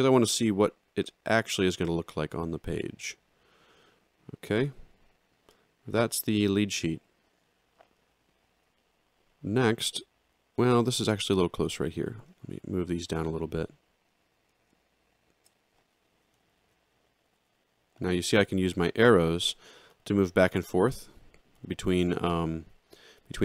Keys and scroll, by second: 4.5 ctrl+3, 16.5 ctrl+alt+Down, 17.2 Down.